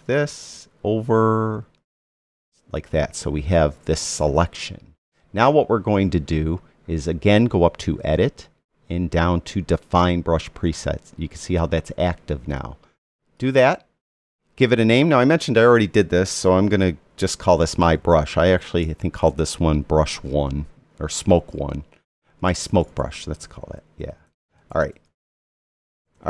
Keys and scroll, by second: 17.5-19.9 typing, 21.3-26.0 typing.